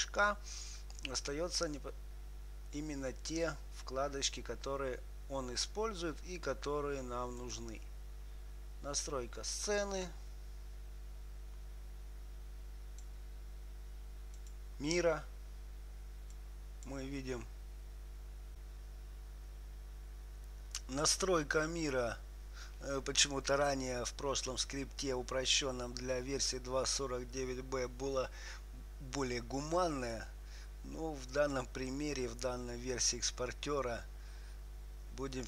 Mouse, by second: 7.7-9.6 drag, 10.1-17.1 drag, 30.5-32.5 drag.